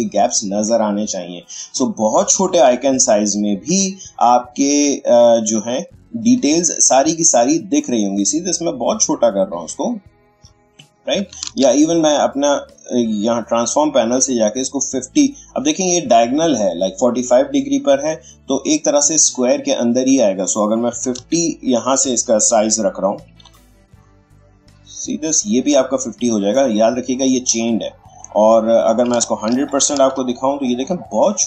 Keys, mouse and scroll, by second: 2.5 ctrl+space, 3.7-10.7 drag, 11.5 ctrl+z, 13.5-17.9 drag, 23.1 typing, 24.7 Tab, 26.0 click, 28.3 click, 29.7 ctrl+1, 30.7 click, 30.7 click, 30.9 space, 31.1 click, 31.3 space.